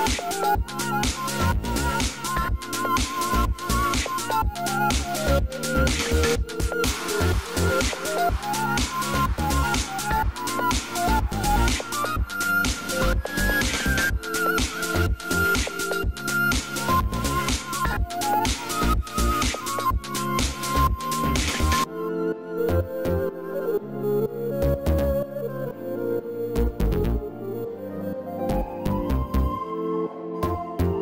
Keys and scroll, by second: 21.9 ctrl+z.